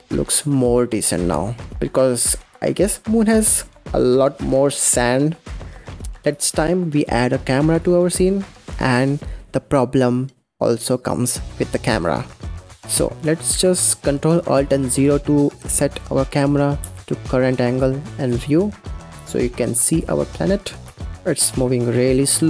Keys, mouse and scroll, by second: 5.9-6.3 scroll down 2, 6.3 shift+a, 8.9-10.6 scroll down 1, 10.6-11.9 scroll down 1, 14.8 ctrl+alt+KP_0, 16.7 g, 17.6 g, 18.1 g, 18.7 g, 20.4 g, 21.2-21.6 scroll down 2, 21.3 middle click, 21.6 middle click, 22.3 g.